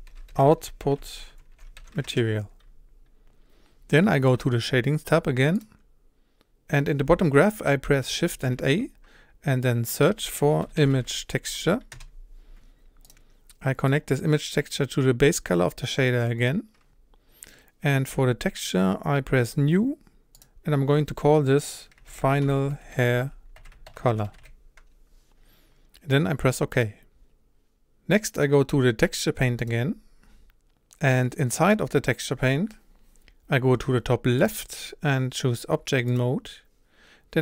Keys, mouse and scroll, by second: 2.1 BackSpace, 5.6-8.3 drag, 14.1-26.8 drag, 29.6 click, 33.6-36.2 scroll down 7, 36.2-37.4 drag.